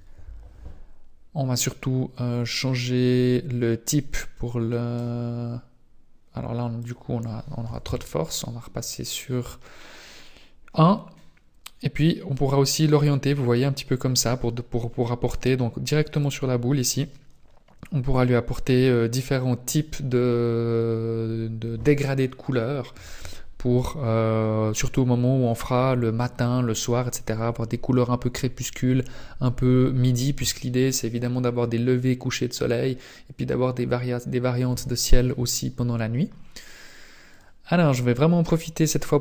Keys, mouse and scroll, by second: 2.5 click, 6.7 click, 11.9 click, 15.1 click, 37.3 right click.